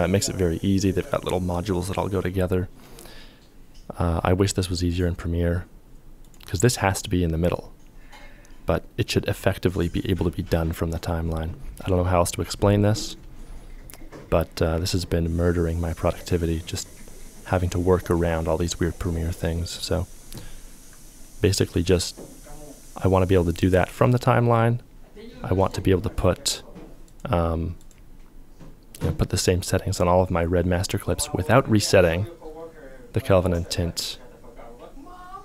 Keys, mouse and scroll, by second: 3.8 ctrl+click, 3.8 f.